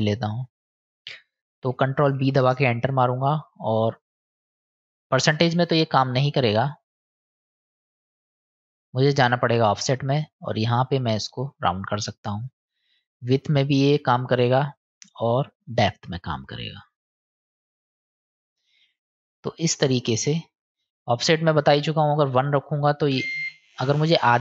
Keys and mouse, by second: 2.4 ctrl+b, 4.3-6.8 drag, 7.2-8.5 drag, 8.9 click, 10.3-11.8 drag, 12.4 click, 13.7 click, 15.1 click, 16.6-20.0 drag, 20.6 click, 21.9-24.4 drag.